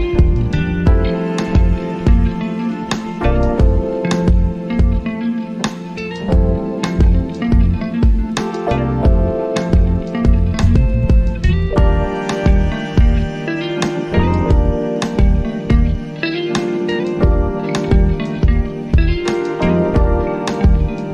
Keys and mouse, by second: 6.1 alt+Num_Lock, 6.1-15.3 drag, 16.4-21.1 shift+drag.